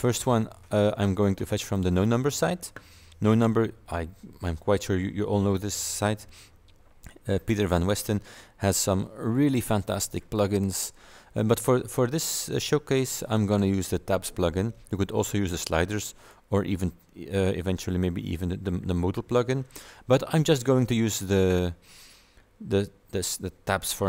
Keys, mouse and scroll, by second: 0.0-0.2 typing, 11.1-12.1 scroll down 4, 13.2 scroll down 2.